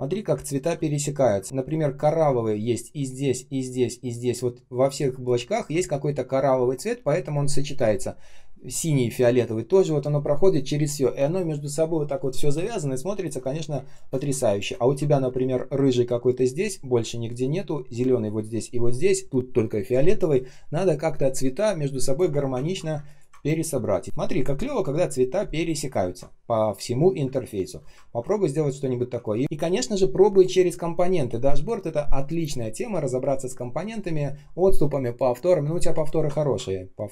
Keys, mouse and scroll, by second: 0.2 space, 5.0 space, 5.5 space, 13.1 ctrl+scroll down 1, 13.4 space, 13.9 space, 14.7 ctrl+scroll up 1, 22.5-22.8 ctrl+scroll down 1, 22.8 space, 23.3 ctrl+scroll up 1, 25.9-27.0 ctrl+scroll down 1, 27.1 space, 27.6 space, 27.7 space, 27.9 ctrl+scroll up 1, 29.2 ctrl+scroll down 1, 29.7 ctrl+shift+3, 33.9 ctrl+shift+3, 36.2 ctrl+scroll up 1.